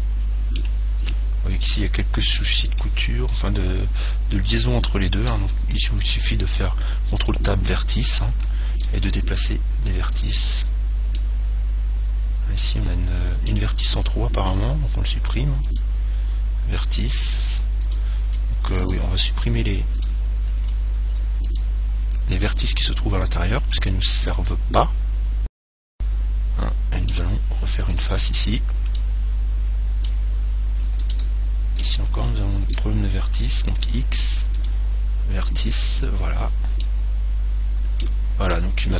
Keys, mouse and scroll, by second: 5.6 ctrl+Tab, 8.1 right click, 9.0 g, 10.5 click, 11.4-13.3 middle drag, 14.8 x, 17.0-18.8 middle drag, 18.1 right click, 18.6 x, 20.2 right click, 20.8 x, 22.7-24.7 middle drag, 28.0 right click, 29.2 middle click, 29.9 middle click, 30.8-31.4 scroll up 1, 31.4-33.1 middle drag, 34.0 x, 35.6-36.6 middle drag, 36.6-37.0 scroll down 1, 37.0-38.9 middle drag.